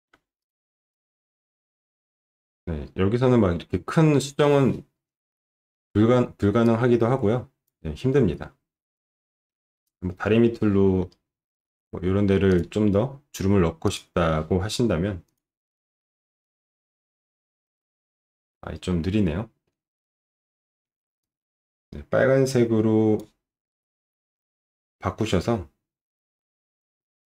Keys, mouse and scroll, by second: 0.5-1.8 drag, 6.7 click, 8.8 alt+middle click, 11.1 alt+middle click, 12.5 click, 13.9 click, 15.3 click, 21.2-23.1 drag.